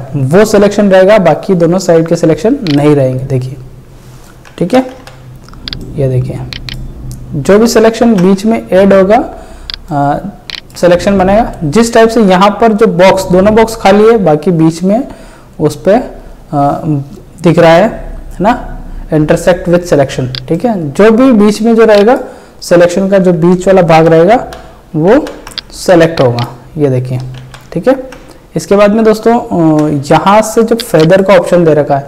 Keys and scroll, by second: 4.9 ctrl+alt+z, 8.0 ctrl+z, 23.9 ctrl+z, 27.4 ctrl+z, 29.7 ctrl+d.